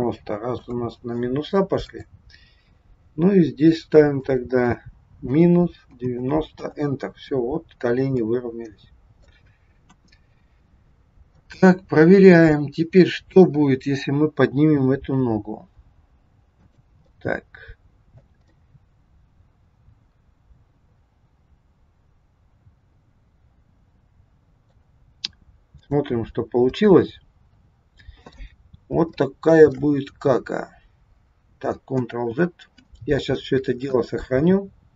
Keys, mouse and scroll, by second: 1.8 click, 4.1 click, 8.2 middle click, 9.7 KP_1, 10.3-10.8 scroll down 3, 10.9-11.2 scroll up 1, 11.4 middle click, 13.2 click, 15.0 g, 17.0 middle click, 18.6 middle click, 25.8 click, 26.2 scroll up 2, 26.7 middle click, 29.1 shift+middle click, 32.1 ctrl+z.